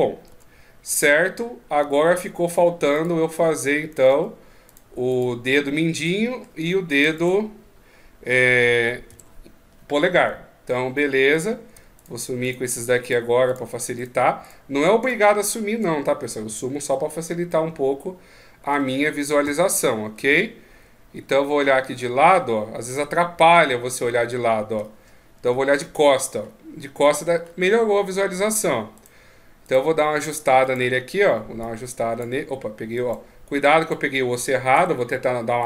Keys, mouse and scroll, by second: 0.1 Tab, 0.7 middle click, 2.3 Tab, 2.7 right click, 3.9 Tab, 4.4 right click, 4.8 right click, 5.2 Tab, 5.8 middle click, 6.8 a, 8.9 alt+h, 10.4 middle click, 11.1 right click, 11.7 shift+right click, 16.2 h, 17.2 middle click, 19.2 KP_3, 20.0 ctrl+KP_3, 20.9 KP_3, 22.3-22.7 scroll down 3, 22.7 middle click, 25.3 ctrl+KP_1, 26.1 scroll up 3, 27.1-28.5 scroll up 6, 28.5 shift+scroll up 1, 28.7 right click, 30.4 right click, 31.4 click, 32.7 right click, 34.1 click, 34.5 h, 35.4 right click.